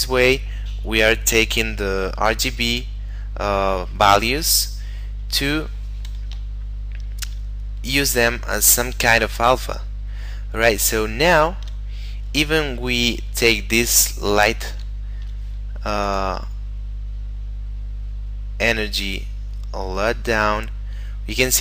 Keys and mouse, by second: 3.9 middle click, 6.7 shift+middle click, 9.3 shift+middle click, 12.1 middle click, 13.0 right click, 13.5 middle click, 15.1 shift+middle click, 16.1 click, 16.9 middle click, 18.9 click.